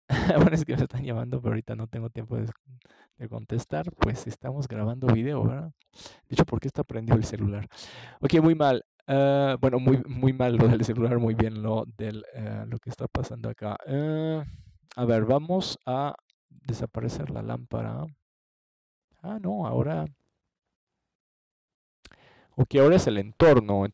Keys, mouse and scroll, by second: 0.0-1.3 drag, 3.8 middle click, 4.9 middle click, 14.3-15.3 middle drag, 15.7-16.8 middle drag, 19.5 ctrl+s, 21.7 click.